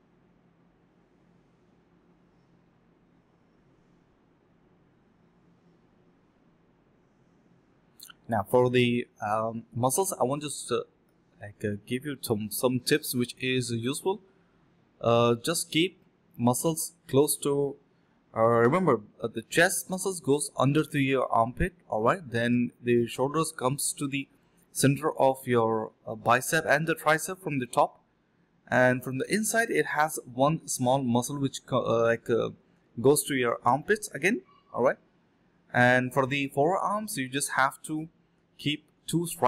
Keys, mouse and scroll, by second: 0.9 ctrl+b, 1.2-1.6 typing, 2.7 alt+click, 3.6 alt+click, 3.8 ctrl+shift+click, 4.2 f, 4.4 alt+click, 4.6 alt+click, 4.8 alt+click, 5.1 alt+click, 5.8 alt+click, 6.4 alt+click, 6.4 alt+click, 7.0 alt+click, 7.3 alt+click, 7.6 typing, 9.1 ctrl+b, 9.5 typing, 9.8 double click, 16.0 shift+click, 17.1 alt+click, 17.4 alt+click, 17.6 alt+click, 17.7 alt+double click, 18.2 ctrl+b, 18.7-19.7 typing, 19.8 shift+click, 19.9 shift+double click, 20.0 shift+click, 20.6 ctrl+z, 20.9 typing, 22.8 alt+click, 24.8 double click, 27.3 alt+click, 27.5 alt+click, 27.6 alt+double click, 28.5 shift+double click, 28.6 shift+double click, 29.1 typing, 29.5 alt+click, 29.9 alt+click, 30.0 alt+click, 30.2 alt+click, 30.3 alt+click, 30.9 ctrl+b, 31.5-32.4 typing, 32.7 double click, 35.7-36.5 typing, 36.0 double click, 36.9 double click, 37.2 shift+click, 37.3 shift+double click, 37.3 shift+click, 37.9 alt+click, 38.3 alt+click, 38.7 alt+click.